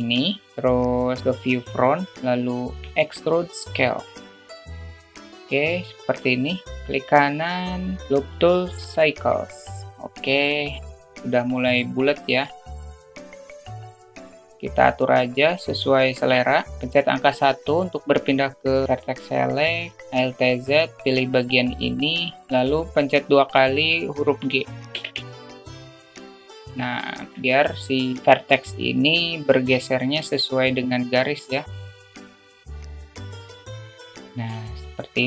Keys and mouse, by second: 2.2 middle click, 3.1 e, 9.3-11.0 right drag, 11.0 s, 13.1 click, 13.9-15.6 drag, 16.5 alt+shift+middle click, 16.7 1, 17.3 alt+shift+middle click, 20.1 click, 20.5 alt+z, 21.4-21.7 drag, 25.4 g, 27.4 alt+shift+middle click, 31.0 click, 31.7 click, 32.3 alt+shift+middle click, 32.8 click, 33.3 click, 34.1 click, 35.0 alt+z.